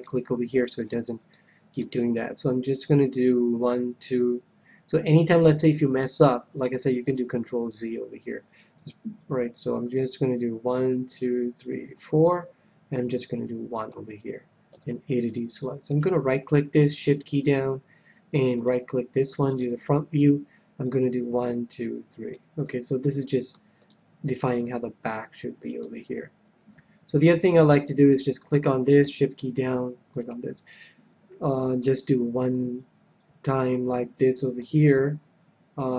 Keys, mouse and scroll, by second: 0.0-1.7 right drag, 0.7-2.9 middle drag, 3.2-4.9 drag, 7.0 ctrl+z, 10.0-11.8 drag, 13.0-14.9 drag, 14.6 a, 15.8-17.7 right drag, 18.5-20.1 right drag, 19.5 KP_1, 21.0-22.4 drag, 22.6-25.3 middle drag, 26.7 KP_3, 27.9-29.9 right drag, 30.1-31.8 right drag, 31.8-33.5 drag.